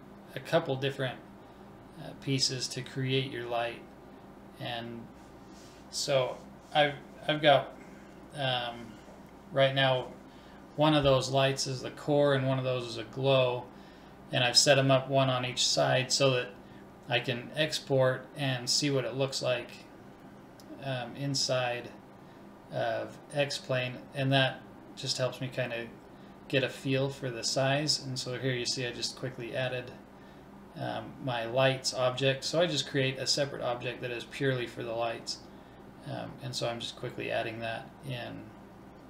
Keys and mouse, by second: 1.0 middle click, 1.2-3.0 drag, 2.9 middle click, 3.2-6.1 drag, 8.3-13.9 middle drag, 11.9 ctrl+s, 13.9-15.7 drag.